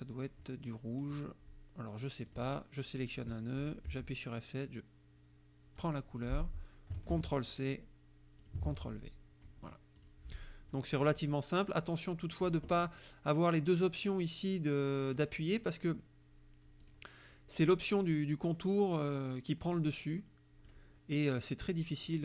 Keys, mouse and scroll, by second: 2.3 click, 3.9 F7, 5.8 click, 7.1 ctrl+c, 8.4 ctrl+click, 8.7 ctrl+v, 9.5 F1, 9.7 click, 10.0 click, 11.9 click, 15.2 click, 16.9 click, 17.7 click, 19.8 click, 21.8 click.